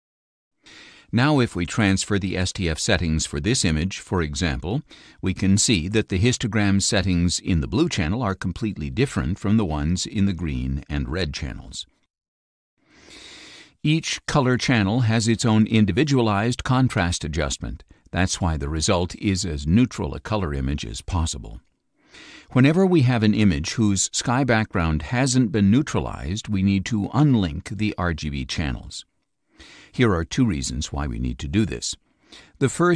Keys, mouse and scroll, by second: 1.4-4.6 drag, 7.5 click, 10.5 click, 11.1 click, 12.1 click, 13.2 click, 14.5 click, 16.8 click.